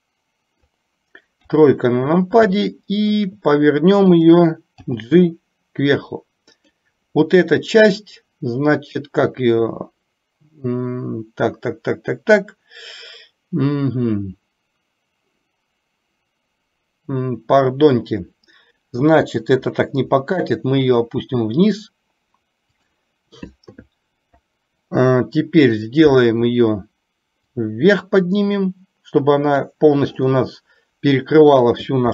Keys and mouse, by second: 1.5 KP_3, 2.9 shift+middle click, 4.3 click, 4.8 g, 19.3 g, 23.4 click, 27.5-29.8 drag, 31.7 click.